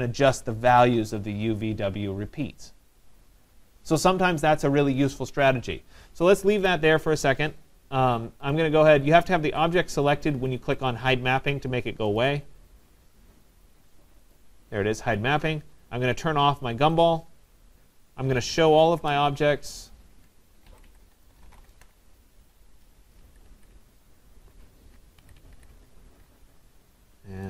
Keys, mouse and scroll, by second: 6.5 Escape, 8.5 click, 10.9 click, 12.2 click, 14.3 click, 17.1 click, 18.3-19.7 typing, 20.8 Escape, 21.0 Escape, 21.0 click, 21.1-22.2 typing, 23.2 Escape, 23.5 Escape, 23.8 Escape, 24.1 typing.